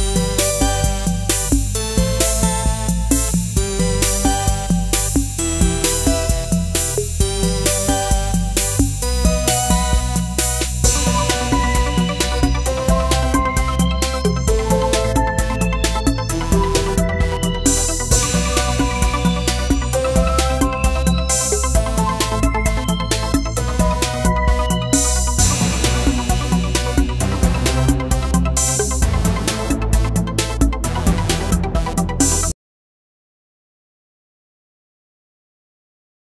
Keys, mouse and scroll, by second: 0.4-13.4 drag, 13.4-18.6 drag, 18.6 z, 19.6 click, 19.6 click, 26.4-32.3 shift+drag, 36.2 click.